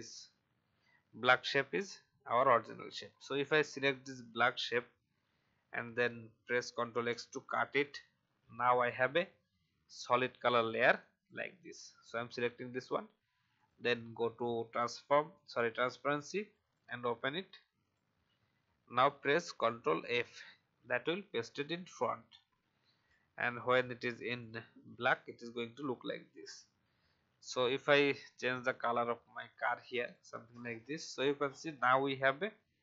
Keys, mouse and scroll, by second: 2.3-3.1 alt+scroll down 1, 3.9 click, 6.9 ctrl+x, 8.5-17.7 drag, 20.0 ctrl+f, 24.3-32.8 drag.